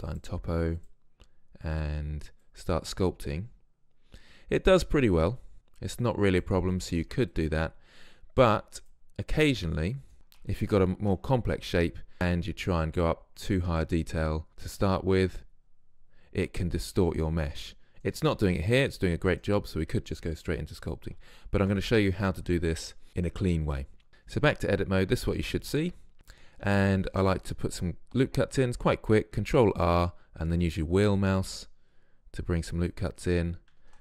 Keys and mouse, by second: 6.9-7.3 middle drag, 7.3-9.3 drag, 10.1 ctrl+z, 10.5 ctrl+z, 12.8 click, 18.1-21.3 middle drag, 21.3 ctrl+z, 24.1-27.1 middle drag, 27.1 ctrl+r, 33.1-34.0 drag, 33.9 ctrl+r.